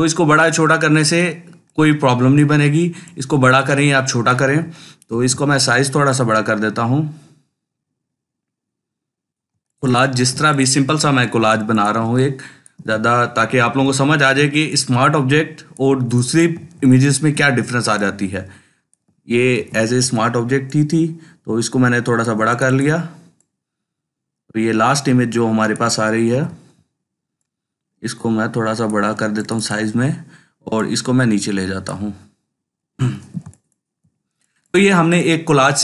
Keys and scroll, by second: 4.9 ctrl+t, 10.2 ctrl+space, 10.7-11.4 ctrl+space, 13.5 ctrl+t, 16.5 ctrl+space, 19.4 ctrl+t, 26.1 ctrl+t, 33.2 ctrl+space.